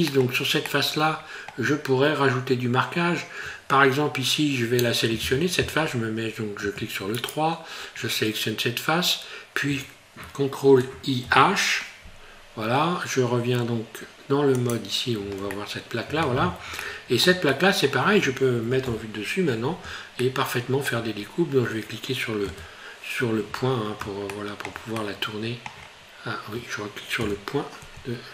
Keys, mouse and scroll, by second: 0.1 middle click, 0.7 middle click, 0.8 shift+middle click, 2.0 scroll up 1, 7.4 right click, 11.3 h, 14.7 click, 15.5 middle click, 16.8 shift+middle click, 17.5 middle click, 18.9 KP_7, 20.2 shift+middle click, 21.1 scroll up 4, 22.4 KP_Decimal, 23.6 scroll up 2, 24.3 shift+middle click, 24.9 middle click, 25.7 scroll down 6, 27.2 KP_Decimal.